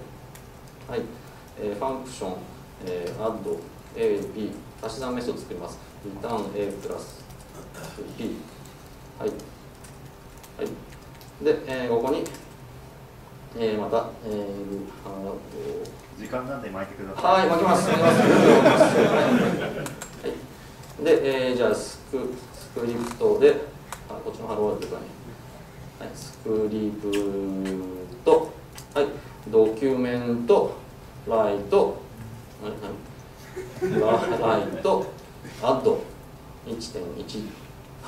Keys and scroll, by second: 2.1 Tab, 10.4 ctrl+Left, 16.7 Tab, 23.1 Tab, 30.2 Tab, 33.0 super+z, 34.4 Tab.